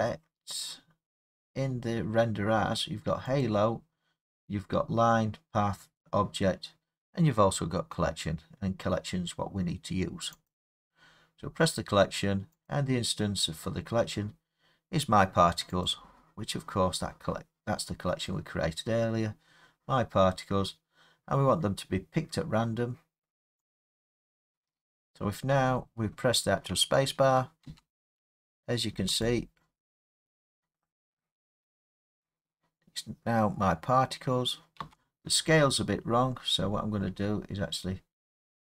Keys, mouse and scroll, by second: 0.3-3.4 scroll, 3.4 click, 10.5 click, 12.7 click, 15.9 click, 23.8 click, 24.8 middle click, 24.9 middle click, 25.5 middle click, 25.6 middle click, 27.7 space, 29.3 click, 34.8 space, 35.7 middle click, 35.7 middle click, 35.8 middle click, 36.1 middle click, 36.6 middle click, 36.7 middle click.